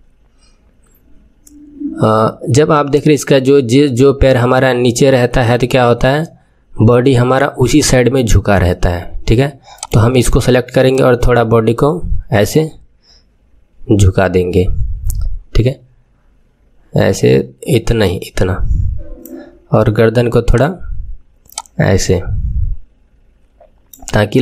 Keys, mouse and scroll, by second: 9.7 click, 10.8 click, 20.4 click, 21.4 click.